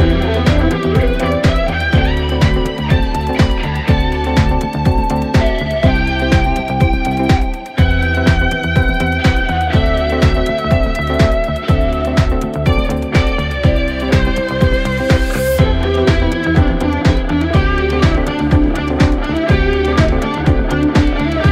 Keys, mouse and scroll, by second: 15.4-15.9 alt+scroll down 2, 15.9 space, 16.0-16.6 click, 16.4 space, 17.8-19.7 drag.